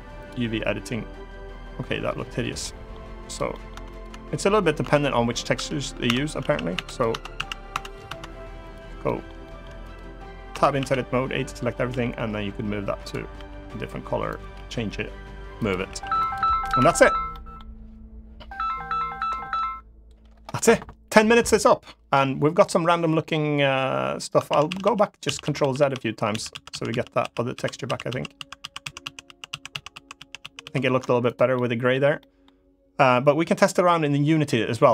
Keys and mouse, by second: 2.3 middle click, 3.2 middle click, 3.7 Tab, 3.7 click, 3.8 Tab, 4.5 Tab, 5.3 Tab, 5.8 Tab, 6.1 a, 6.5 Tab, 6.7 click, 6.8 Tab, 7.1 a, 7.4 Tab, 7.5 click, 7.8 Tab, 8.7 middle drag, 9.1 shift+middle drag, 9.6 click, 10.2 Tab, 10.5 a, 11.6 g, 12.7 click, 13.1 r, 14.0 click, 14.3 g, 15.3 click, 15.6 s, 15.9 click, 16.5 Tab, 17.0 middle drag, 24.2 ctrl+z, 24.4 ctrl+z, 24.6 ctrl+z, 25.0 ctrl+z, 25.1 ctrl+z, 25.3 ctrl+z, 25.5 ctrl+z, 26.0 ctrl+z, 26.2 ctrl+z, 26.4 ctrl+z, 26.6 ctrl+z, 26.9 ctrl+z, 27.3 ctrl+z, 27.6 ctrl+z, 27.8 ctrl+z, 28.1 ctrl+z, 28.3 ctrl+z, 28.5 ctrl+z, 28.7 ctrl+z, 29.0 ctrl+z, 29.2 ctrl+z, 29.4 ctrl+z, 29.6 ctrl+z, 29.9 ctrl+z, 30.1 ctrl+z, 30.3 ctrl+z, 31.2-31.6 middle drag, 31.9 middle drag.